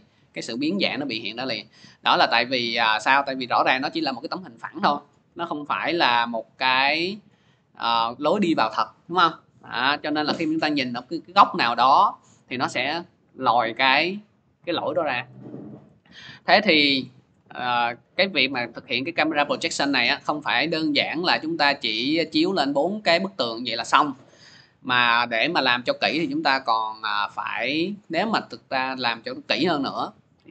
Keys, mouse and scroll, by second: 15.1 click, 15.7 ctrl+z, 17.0 ctrl+z, 17.8 ctrl+z, 19.4 ctrl+z, 20.2 ctrl+z, 21.1 ctrl+z, 22.1 ctrl+z, 27.8 click, 28.8-30.5 drag.